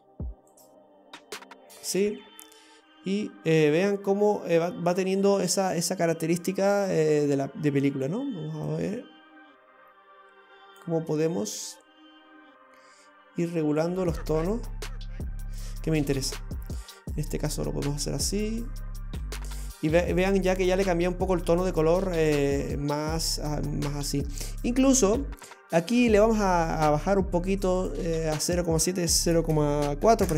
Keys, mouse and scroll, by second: 0.6 click, 3.0-4.5 scroll down 14, 4.5-5.5 scroll up 13, 7.9 click, 8.7 click, 11.6 click, 16.1-17.6 scroll down 3, 17.6 click, 20.4-21.3 scroll down 6, 23.8-24.3 scroll up 3, 24.5 middle click, 25.3-25.7 scroll up 5, 27.8 click.